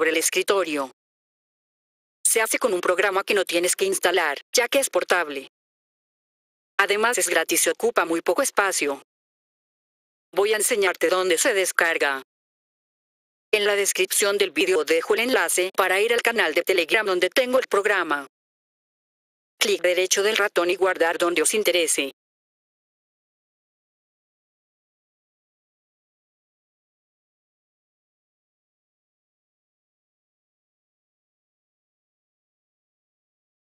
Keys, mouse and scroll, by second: 0.8 click, 1.0 click, 7.5 click, 10.1 click, 11.7 click, 14.4 click, 14.6 click, 18.4 click, 20.3 click, 20.6 click, 20.8 click, 21.0 click, 22.5 scroll down 2, 24.6 click.